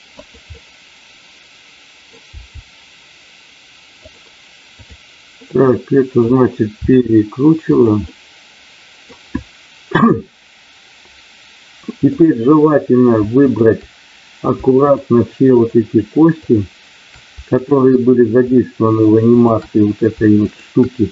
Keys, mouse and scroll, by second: 0.2 click, 1.7 middle click, 2.3 g, 3.9 click, 5.3 middle click, 6.8 r, 7.7 click, 10.2-13.1 middle drag, 14.8 shift+click, 17.5 shift+click, 19.3 shift+click, 20.4 shift+click.